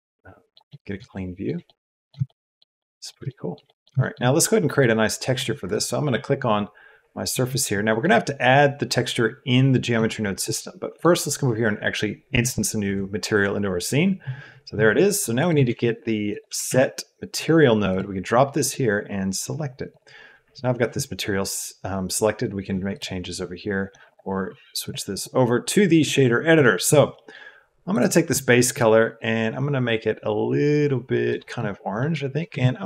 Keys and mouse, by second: 1.1 shift+middle click, 1.6 middle click, 2.2 shift+middle click, 2.7 middle click, 3.2 shift+click, 3.6 click, 3.9 shift+click, 4.8 click, 7.4 click, 7.9 middle click, 8.2 click, 10.9 click, 13.2 click, 15.6 shift+a, 18.7-20.1 drag, 24.0 click, 24.8 click, 25.1-26.1 drag, 26.6 middle click, 27.1 middle click, 31.4 click, 32.0 middle click, 32.4 shift+a.